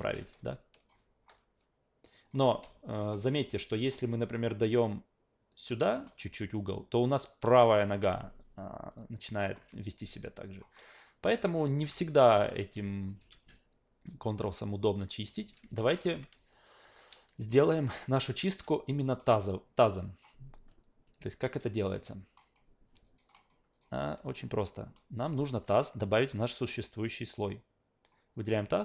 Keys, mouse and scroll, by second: 0.0 ctrl+z, 0.2 alt+right click, 0.4-0.9 alt+drag, 1.6 click, 2.4 ctrl+z, 2.9 alt+right drag, 3.1 alt+middle drag, 3.4 alt+right drag, 3.7 alt+click, 4.6 click, 7.9 ctrl+z, 10.2 click, 11.6 alt+middle drag, 11.9 Tab, 12.3 q, 12.9 alt+click, 13.2 e, 14.1-15.3 drag, 15.4 ctrl+z, 15.8 alt+drag, 16.1 q, 16.5 alt+middle click, 17.3 alt+click, 17.7 alt+middle click, 18.1 alt+right click, 19.0 click, 19.4 alt+middle click, 19.7 alt+click, 23.0 alt+right click, 23.3 alt+middle click, 23.7 alt+right click, 25.4 alt+right click.